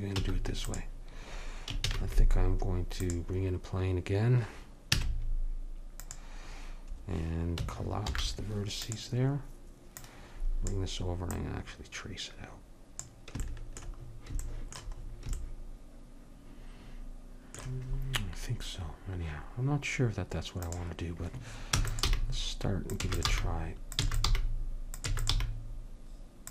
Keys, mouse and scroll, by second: 0.2 x, 1.9 shift+a, 4.9 Tab, 8.1 alt+m, 10.0 click, 11.4 click, 11.6-13.0 drag, 21.7-25.3 typing.